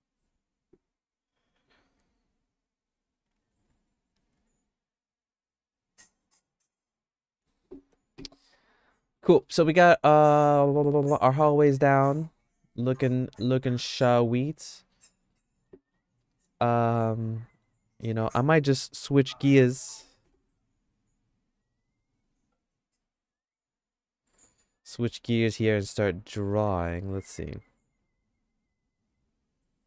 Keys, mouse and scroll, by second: 9.0 middle click, 9.4-11.6 shift+middle drag, 12.0 middle click, 12.3-15.3 shift+middle drag, 16.2 middle click, 16.7-18.1 shift+middle drag.